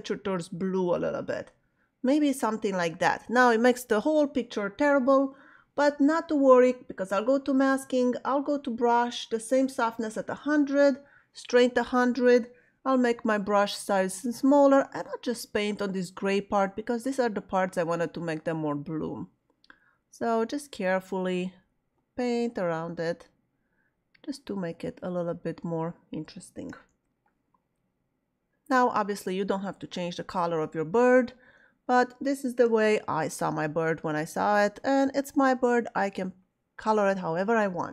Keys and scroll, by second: 13.0 [, 26.7 ], 32.6 [, 34.0 ].